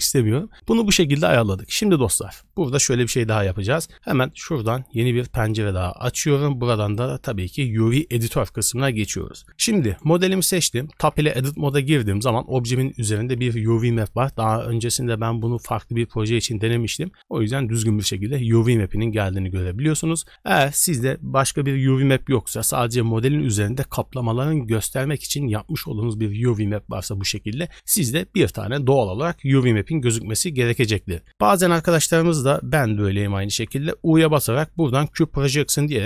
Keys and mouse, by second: 5.5 click, 7.0-7.9 drag, 11.1 Tab, 12.3 a, 14.3 click, 19.9 click, 33.6 u.